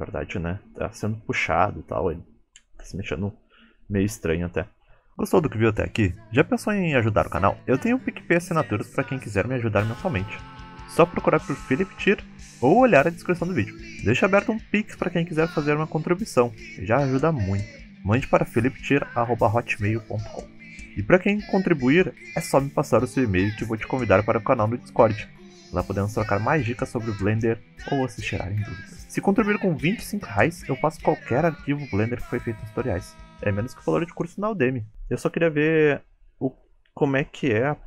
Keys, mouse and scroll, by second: 0.4 click, 1.5 scroll down 2, 1.8 middle click, 2.3 scroll up 3, 2.7 space, 3.0 middle click, 6.3 space, 12.2-15.3 scroll down 2, 21.2 space, 23.9 click, 24.6-26.5 scroll down 2, 25.1 middle click, 26.6 shift+middle click, 27.3 middle click, 30.0 click, 31.0 scroll down 2, 31.3 middle click, 31.8 scroll up 3, 32.2 space, 32.6 middle click.